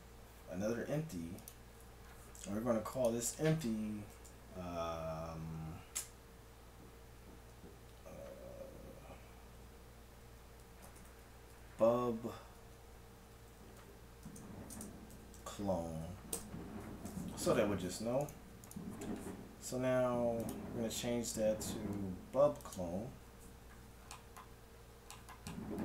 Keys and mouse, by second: 2.9-4.7 drag, 4.7 middle click, 18.3-20.6 right drag, 20.4-22.1 drag, 22.1-25.6 middle drag.